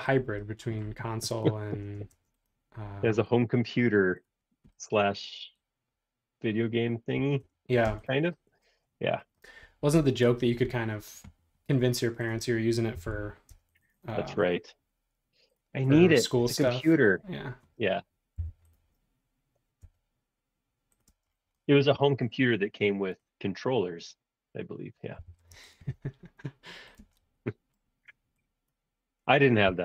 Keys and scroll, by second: 2.1 space, 7.4 Return, 7.8 space, 13.0 m, 13.5 space, 18.4 m, 21.2 space, 25.2 m, 27.1 space, 29.6 m.